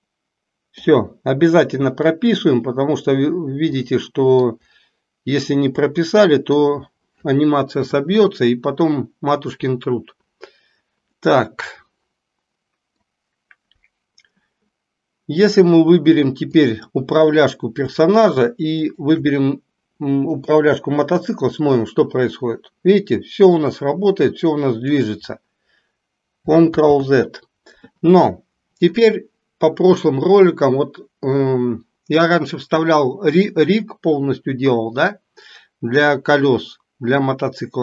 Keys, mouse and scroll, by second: 2.1-3.2 drag, 3.8 middle click, 5.9 middle click, 11.2-13.2 middle drag, 16.6 click, 18.7 shift+click, 21.6-25.0 drag, 26.8 ctrl+z.